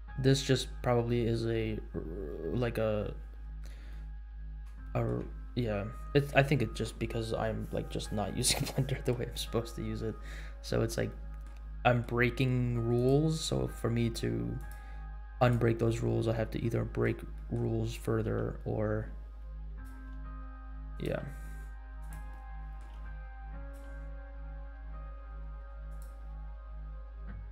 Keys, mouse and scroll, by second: 0.3-1.0 scroll down 1, 1.0 scroll down 1, 1.5-1.8 scroll down 2, 2.3 scroll down 2, 2.9 scroll down 1, 3.3 scroll up 2, 3.9-4.3 shift+middle drag, 4.8-5.2 shift+middle drag, 10.3-10.8 scroll up 4, 11.0 middle click, 11.8 middle click, 12.9 click, 14.7 click, 15.3-15.7 drag, 16.0-16.4 scroll down 3, 16.6-17.0 middle drag, 17.3 middle click, 18.2 g, 20.1 r, 21.2 g, 22.4 middle click, 22.9 r, 23.7 g, 26.2-26.7 scroll down 3.